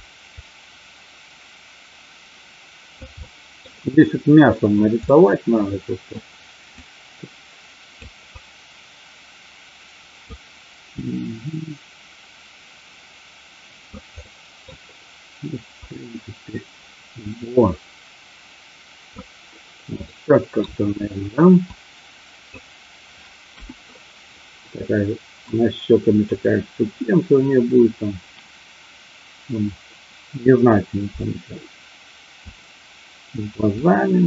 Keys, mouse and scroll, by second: 0.2-3.0 drag, 3.1 middle click, 5.0-6.1 middle drag, 6.9-8.0 drag, 8.2-10.4 drag, 10.9-13.9 drag, 14.1 middle click, 15.9-19.1 drag, 20.0 middle click, 21.6 click, 23.4 KP_1, 25.4 click, 31.3-32.3 drag, 33.7-34.2 drag.